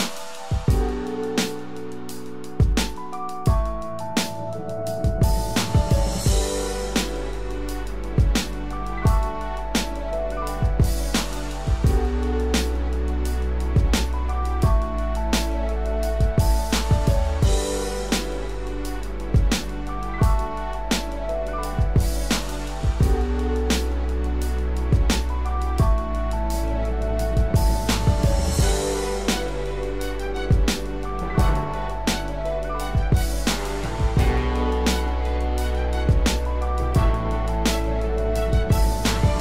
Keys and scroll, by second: 6.3 ctrl+=, 35.3 ctrl+-, 35.6 ctrl+0, 36.7 ctrl+=.